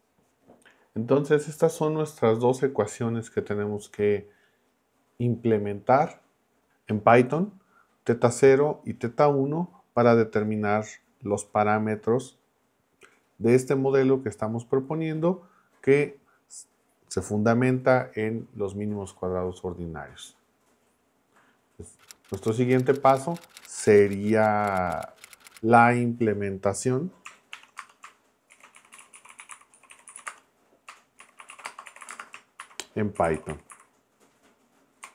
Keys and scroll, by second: 30.5-34.2 typing.